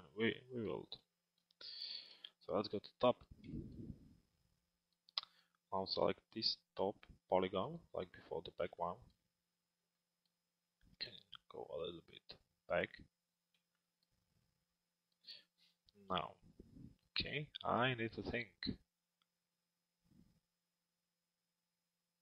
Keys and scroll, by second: 1.7 t.